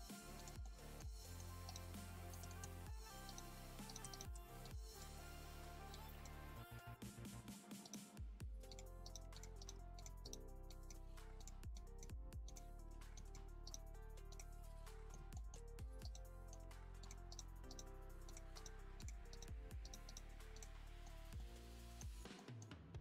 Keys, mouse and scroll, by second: 0.6 middle click, 1.0 scroll down 3, 1.2 middle click, 1.5 1, 1.6 right click, 2.0 middle click, 2.6-3.1 scroll up 1, 3.1 2, 3.2 right click, 3.4 g, 4.1 shift+right click, 4.6-5.7 drag, 5.7 1, 6.7 KP_3, 7.1 alt+a, 7.8 right click, 8.1 g, 9.0 right click, 9.2 g, 9.5 right click, 9.7 g, 10.2 right click, 10.6 click, 11.1 g, 11.7 click, 12.0 g, 13.1 click, 13.6 right click, 13.8 g, 14.8 scroll down 1, 14.8 middle click, 15.2 Tab, 15.3 middle click, 15.5 Tab, 16.0 right click, 16.3 middle click, 16.7 g, 17.3 right click, 17.7 right click, 17.9 g, 18.5 right click, 18.7 g, 19.3 right click, 19.5 g, 20.0 right click, 20.2 g, 20.8 middle click, 21.1 Tab, 21.3 scroll up 1, 21.3-22.1 middle drag, 22.1 Tab, 22.3 middle click, 22.6 scroll down 3, 22.8 Tab.